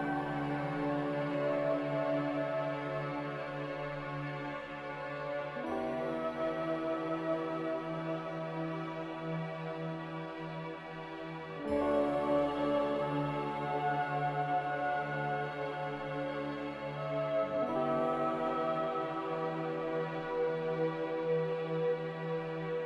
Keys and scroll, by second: 22.7 b.